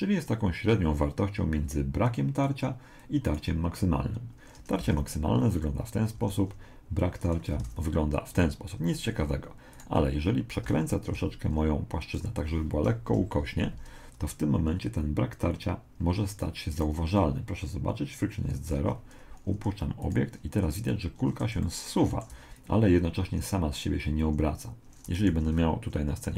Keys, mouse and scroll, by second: 2.0-4.6 drag, 5.0 alt+a, 6.2 Escape, 7.0 click, 7.6 alt+a, 8.8 Escape, 9.8 right click, 10.6 r, 13.1 KP_1, 16.7 right click, 18.8 alt+a, 20.0 right click, 21.6 middle click, 22.3-23.5 drag, 24.2 Escape, 25.3 shift+a.